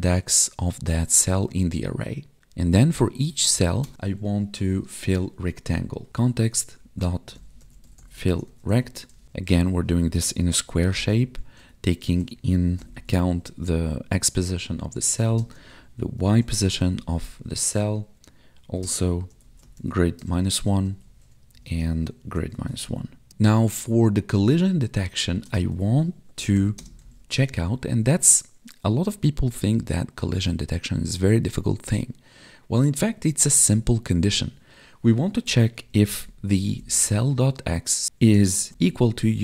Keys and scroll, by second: 2.5 Right, 15.3 space, 18.8 space, 20.2 space, 20.7 space, 21.6 space, 26.7 space, 38.3 space.